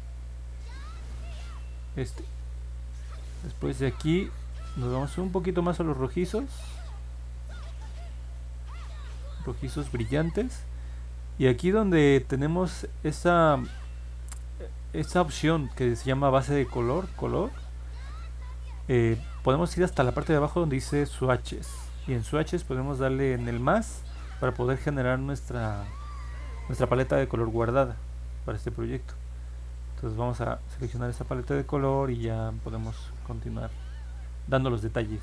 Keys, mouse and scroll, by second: 12.6 click, 13.6-15.0 drag.